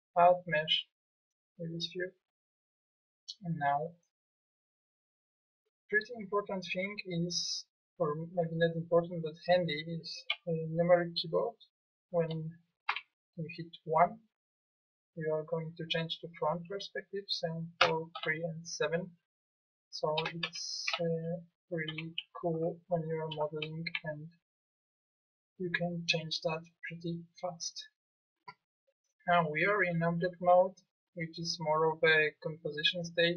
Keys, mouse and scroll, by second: 3.6 middle click, 6.3 click, 12.9 KP_1, 17.8 KP_3, 18.1 KP_3, 18.3 KP_7, 20.2 KP_1, 20.5 KP_3, 20.9 KP_7, 22.7 KP_3, 23.5 KP_7, 23.9 KP_1, 29.1-32.2 middle drag.